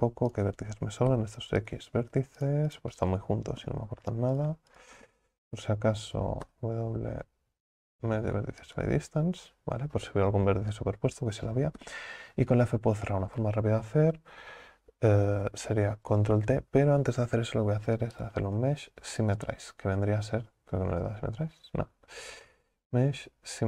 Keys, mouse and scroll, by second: 0.3 shift+right click, 2.4 shift+right click, 4.4 right click, 4.8 shift+right click, 5.4 a, 5.6 a, 18.2-21.2 drag, 22.6-23.6 drag.